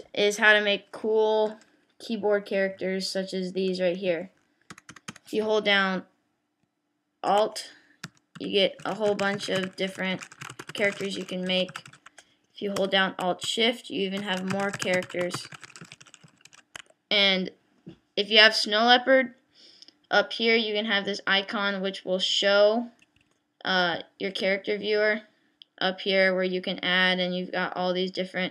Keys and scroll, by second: 4.7 Return, 8.0 alt+°, 8.4 alt+l, 8.8 alt+k, 8.9 alt+j, 9.1 alt+k, 9.1 alt+u, 9.2 alt+y, 9.3 alt+f, 9.3 alt+y, 9.4 alt+t, 9.6 alt+y, 9.6 alt+s, 9.9 alt+h, 9.9 alt+j, 10.1 alt+g, 10.3 alt+t, 10.5 alt+r, 10.7 alt+e, 10.8 alt+w, 10.8 alt+t, 11.0 alt+j, 11.2 alt+k, 11.3 alt+;, 11.3 alt+l, 11.6 alt+[, 11.7 alt+u, 11.8 alt+o, 11.9 alt+i, 12.8 Return, 15.3 alt+shift+w, 15.4 alt+shift+e, 15.5 alt+shift+y, 15.6 alt+shift+d, 15.8 alt+shift+j, 16.2 alt+shift+i, 16.5 alt+shift+o.